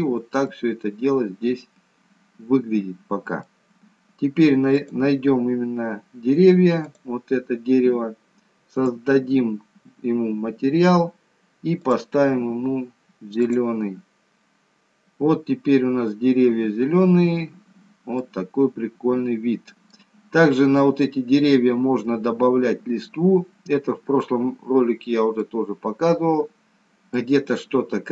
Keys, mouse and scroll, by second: 0.7 middle click, 4.9 click, 5.8-7.1 scroll down 1, 7.1 click, 7.1 scroll down 1, 9.0 click, 15.7-16.9 scroll up 1, 16.9-17.3 scroll up 5, 17.7-18.1 scroll down 2, 18.3 middle click, 23.3 scroll down 2, 24.2-24.9 scroll down 1, 24.9-25.6 scroll down 1, 25.6 middle click.